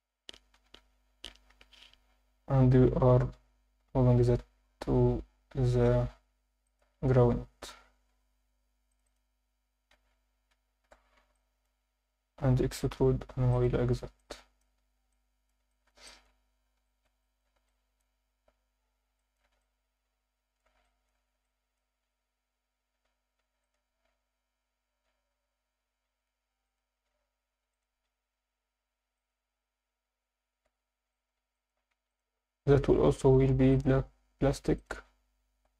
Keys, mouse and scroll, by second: 0.6 ctrl+KP_Add, 1.5 KP_3, 2.8 g, 4.4 z, 6.6 shift+click, 7.2 Tab, 7.5-8.2 scroll down 2, 8.4 Tab, 8.9 click, 9.1 click, 9.9 z, 10.4 a, 11.2 b, 12.9 e, 13.4 y, 13.5 click, 13.7 z, 14.2 alt+middle click, 14.8 Tab, 15.1-15.5 alt+middle drag, 15.7 alt+shift+middle drag, 16.1 ctrl+alt+middle click, 16.4 Tab, 16.8 alt+shift+middle click, 17.2 ctrl+alt+middle click, 17.7 alt+middle click, 18.5-19.1 scroll down 4, 19.2 alt+shift+middle click, 19.6-20.6 ctrl+alt+middle drag, 20.8 alt+shift+middle click, 21.4 ctrl+alt+middle click, 23.4 ctrl+r, 26.6 click, 29.2 click, 29.5 Tab, 29.5 scroll down 2, 30.4 scroll down 5, 30.6 alt+a, 31.1 alt+shift+middle drag, 31.6 ctrl+middle click, 32.1 click, 33.7-34.8 drag, 35.6 alt+a.